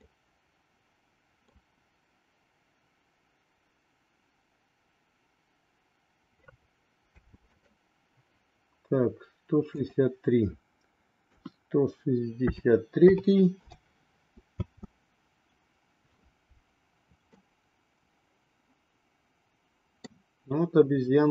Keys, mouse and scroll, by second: 0.1-1.6 middle drag, 7.2 space, 7.5 click, 9.7-13.7 drag, 14.6 space, 17.3-20.1 middle drag.